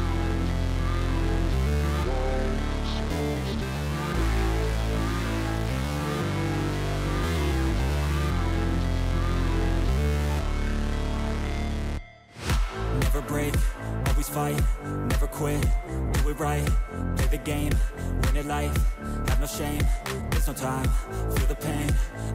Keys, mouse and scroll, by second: 0.2 right click, 1.3 double click, 2.8 double click, 4.1 shift+click, 11.8 shift+click, 13.2 ctrl+z, 20.8 ctrl+j, 21.2 ctrl+click.